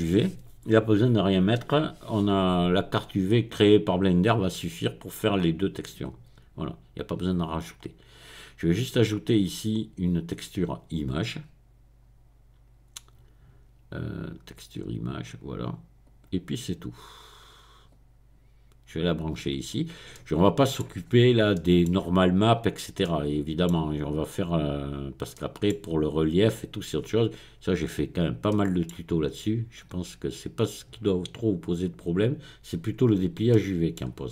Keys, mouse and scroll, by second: 1.5-2.2 scroll up 1, 2.2-2.9 scroll down 1, 2.9 scroll down 1, 3.0-4.7 middle drag, 8.6 click, 15.1 click, 16.0 click, 17.9-19.6 drag, 20.1 middle click, 21.0-21.5 scroll up 1, 21.5-24.1 middle drag, 24.1 click, 24.8-25.3 scroll down 1, 27.0-27.5 scroll up 1, 27.5-28.4 scroll down 1, 29.7-33.0 middle drag, 33.0-33.5 scroll up 1, 34.2 scroll up 1.